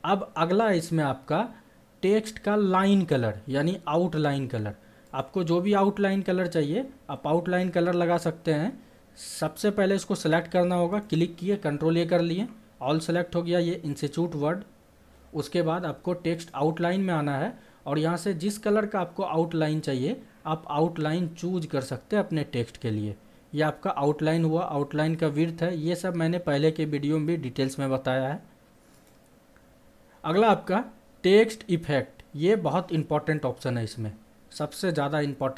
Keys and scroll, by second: 12.2 ctrl+a.